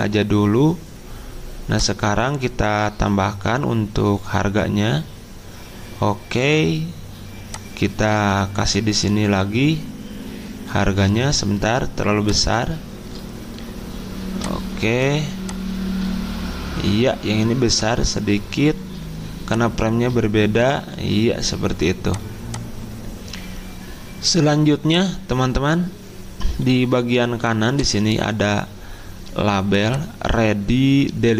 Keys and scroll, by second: 11.1 ctrl+z, 27.3 z.